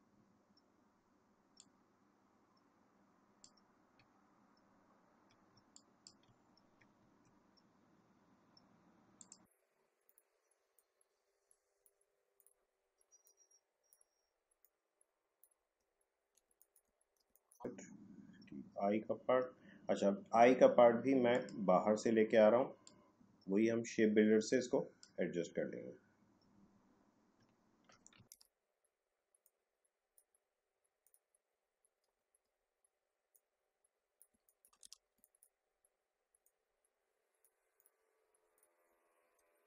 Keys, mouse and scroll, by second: 1.5-4.2 drag, 4.2 alt+scroll up 1, 4.6 alt+scroll down 1, 5.5 space, 5.8 click, 6.1 space, 6.5 alt+scroll up 1, 7.0 space, 9.2-15.9 drag, 15.9 alt+scroll down 1, 16.4 space, 16.6 click, 16.7 space, 16.9 alt+scroll up 1, 17.3 space, 17.5 click, 17.5 space, 21.3-27.5 drag, 27.5-27.9 alt+scroll down 1, 28.1 scroll, 28.3 ctrl+z, 29.4-31.0 drag, 32.2 alt+scroll down 1, 33.3 click, 34.3 space, 34.5 click, 34.5 space, 34.8 ctrl+z, 35.1 space, 35.3 click, 35.4 space, 36.4-37.7 drag, 39.0 alt+scroll up 1.